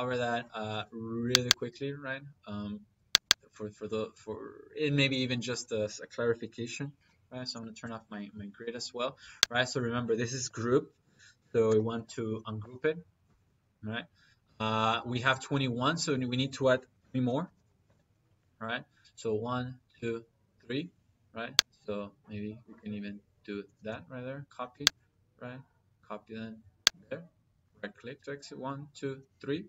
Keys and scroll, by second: 6.8 F7, 8.3 Escape, 11.5 u, 11.9 g, 12.0 r, 12.4 space, 13.1 Escape, 16.2 Escape, 16.8 c, 17.4 p, 17.6 y, 17.7 space, 23.6 space.